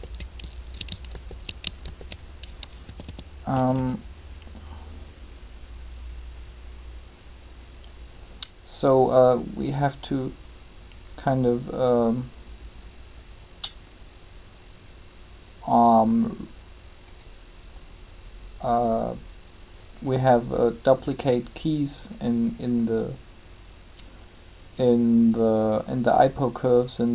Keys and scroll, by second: 1.1 ctrl+z, 2.8-3.7 typing.